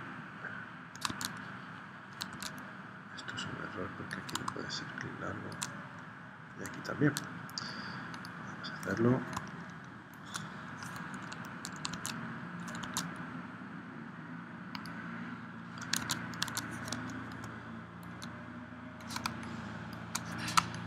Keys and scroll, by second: 1.2 super+Tab, 2.3 super+z, 6.5 super+z, 11.9 super+Tab, 12.9 super+Tab, 16.1 super+Tab, 16.5 super+Tab, 19.4 space, 20.7 space.